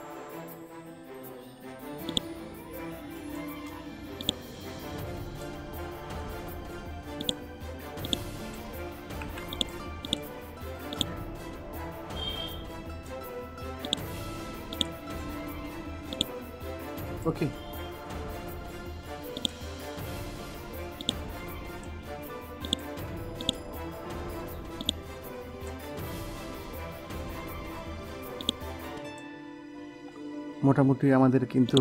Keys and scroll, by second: 9.1 ctrl+z.